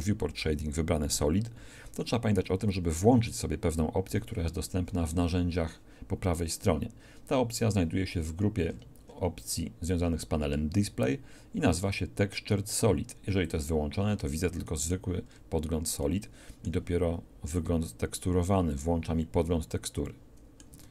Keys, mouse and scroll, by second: 4.0 n, 13.4-15.2 middle drag, 17.4 click, 17.7 click, 17.7 right click, 20.0 middle click, 20.2 middle click, 20.6 middle click, 20.8 Tab.